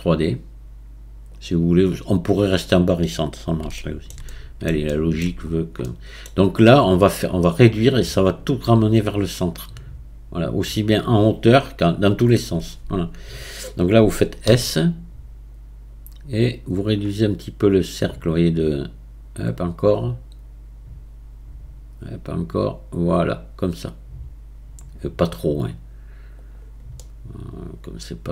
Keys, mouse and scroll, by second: 3.7-5.5 shift+middle drag, 5.5-5.8 scroll up 1, 5.8-8.9 middle drag, 15.3 s, 27.0-28.3 middle drag.